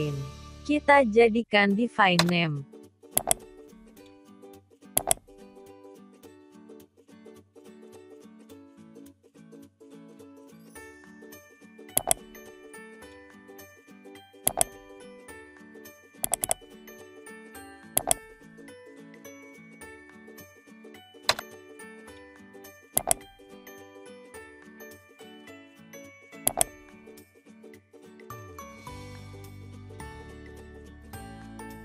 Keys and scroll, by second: 11.9 ctrl+v, 18.5 ctrl+x.